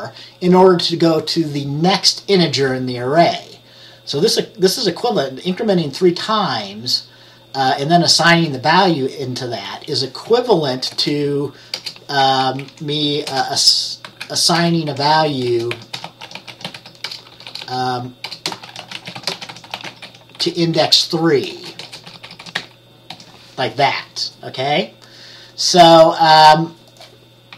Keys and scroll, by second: 11.0 space, 12.5 Down, 13.4-23.7 typing.